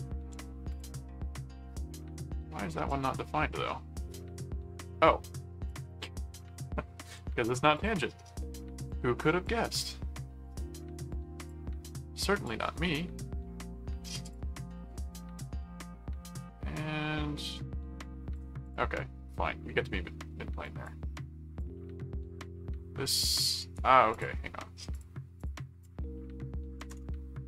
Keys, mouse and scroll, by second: 0.3 alt+a, 0.7 alt+click, 2.9-4.8 drag, 5.7 ctrl+click, 6.5 ctrl+alt+click, 7.3 alt+a, 7.7 click, 8.8 click, 9.4 click, 11.1 click, 12.4-14.0 drag, 14.2 click, 15.4-18.3 drag, 18.6 click, 20.6 click, 21.6-23.1 drag, 23.3 click, 23.6 right click, 24.1 click, 24.9 click.